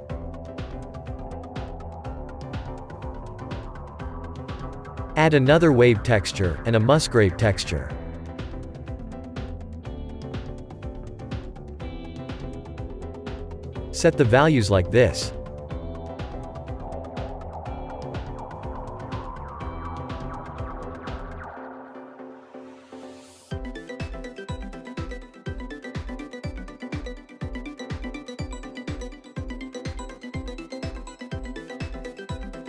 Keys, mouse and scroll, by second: 1.5-3.5 drag, 11.5-13.4 drag, 13.4-15.4 scroll up 6, 15.4-32.6 drag.